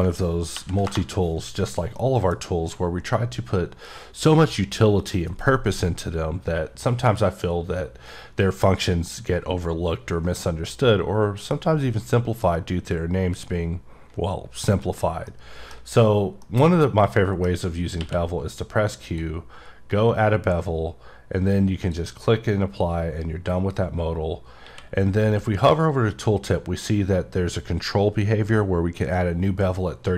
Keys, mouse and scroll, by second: 0.9 scroll down 1, 2.0 middle click, 10.4 middle click, 10.5 middle click, 15.3 middle click, 16.4 middle click, 19.0 click, 20.4-21.7 scroll up 8, 21.8 click.